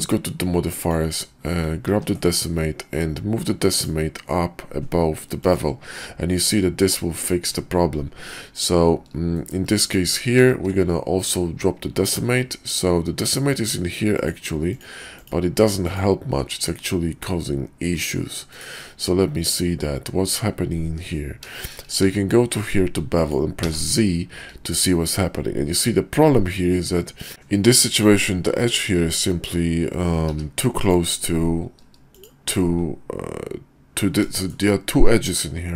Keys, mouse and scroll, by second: 1.9 ctrl+`, 8.3-8.6 drag, 9.3 shift+drag, 9.8 click, 10.5 ctrl+`, 21.4-21.7 shift+middle drag, 22.0 q, 30.3 q, 34.3 shift+middle drag.